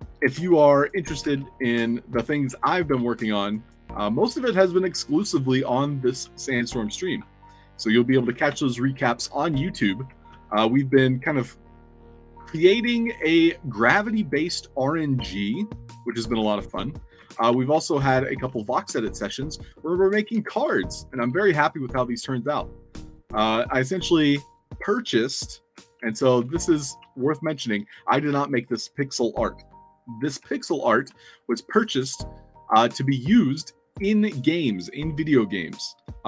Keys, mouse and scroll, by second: 0.5-0.8 alt+drag, 0.9-7.2 typing, 8.4-11.7 typing, 16.0-17.7 typing, 18.2-20.3 alt+shift+right drag, 19.1 s, 20.5 space, 20.6 w, 21.2 s, 22.4 shift+click, 22.7 shift+click, 23.4 shift+click, 25.6-27.4 typing, 29.7 click, 30.4 alt+click, 33.7 click.